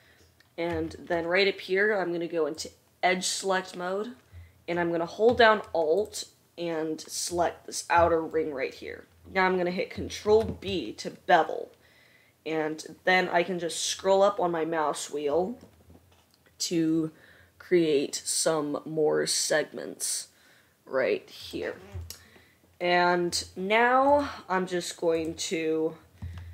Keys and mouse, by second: 2.9-6.4 middle drag, 10.3 ctrl+b, 24.2-25.4 middle drag.